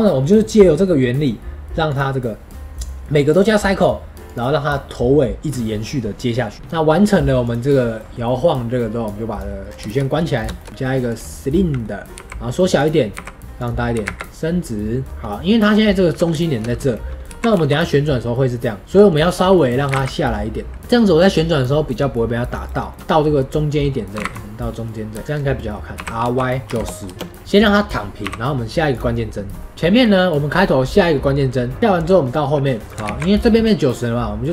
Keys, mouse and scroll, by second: 0.7-1.9 middle drag, 1.9-9.6 drag, 9.6 scroll down 4, 9.8-10.2 shift+middle drag, 10.2 scroll up 2, 10.5-12.1 shift+middle drag, 12.1 s, 13.1 s, 13.9 s, 15.6-16.3 scroll up 3, 16.3-17.2 shift+middle drag, 17.2 r, 19.8 g, 20.7 r, 22.8 middle drag, 23.0 KP_1, 24.1 g, 25.2 middle click, 25.2 scroll down 1, 25.5 middle click, 25.9 r, 28.2 i, 29.5 middle click, 29.7 x, 31.8-32.2 drag, 32.2 middle click, 32.8 click, 33.0 ctrl+z.